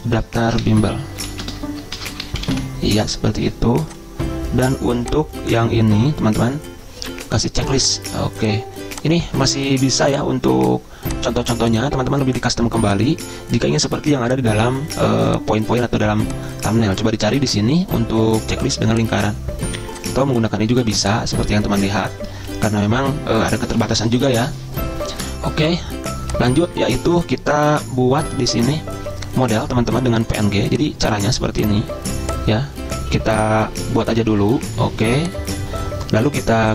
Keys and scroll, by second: 0.5-3.3 typing, 22.7 ctrl+z.